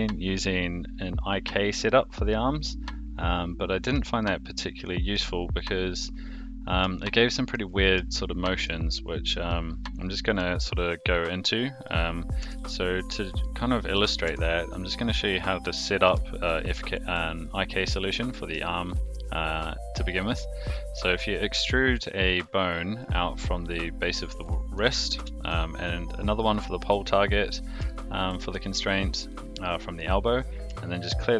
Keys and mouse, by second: 4.2-5.1 shift+middle drag, 7.0-7.5 shift+middle drag, 8.1-8.7 shift+middle drag, 9.5-10.4 shift+middle drag, 12.4 KP_7, 13.4-14.0 shift+middle drag, 14.2 Tab, 14.9 click, 15.7 e, 18.6 shift+middle click, 24.4 click, 24.7 e, 27.8 shift+middle click.